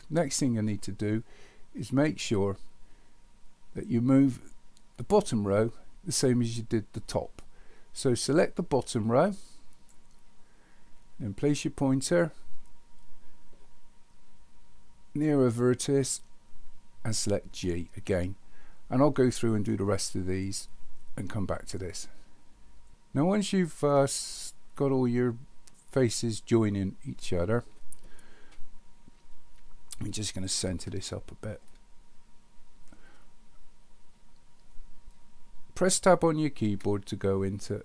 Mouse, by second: 8.5-9.9 drag, 30.3-31.6 middle drag.